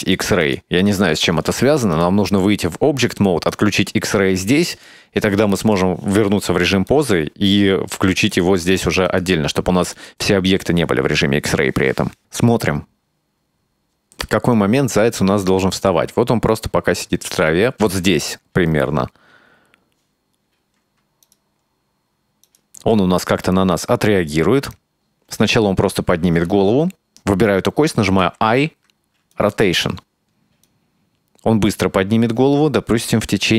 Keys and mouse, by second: 0.1 click, 0.5 click, 2.1-2.5 drag, 3.6 click, 4.8-5.8 drag, 6.9-7.6 shift+middle drag, 8.4 click, 8.8 click, 9.2 click, 10.1 click, 12.2 space, 17.9 space, 21.3 right click, 22.5 right click, 28.3 i, 30.7 click.